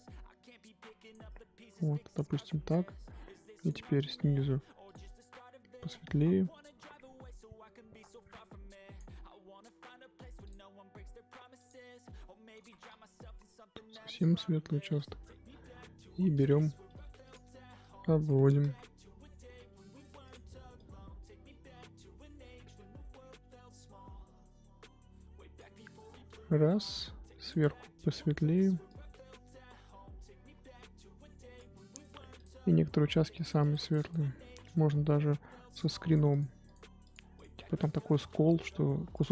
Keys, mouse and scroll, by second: 1.9-2.2 scroll up 1, 2.2 scroll down 1, 3.6 click, 4.5 f, 5.0-8.0 drag, 10.4 click, 11.5-12.6 drag, 12.6 ctrl+z, 12.9-16.4 drag, 16.8 f, 17.8 click, 18.6 ctrl+z, 19.5 f, 20.7-23.8 drag, 27.5 click, 28.8-32.4 drag, 33.3-34.4 drag, 34.4 ctrl+z, 36.6 click, 39.2-39.3 drag.